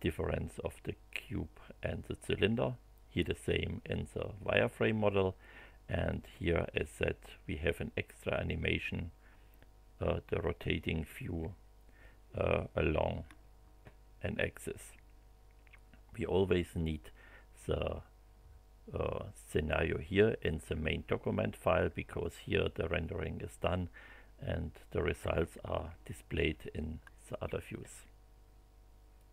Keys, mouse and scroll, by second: 29.1 click.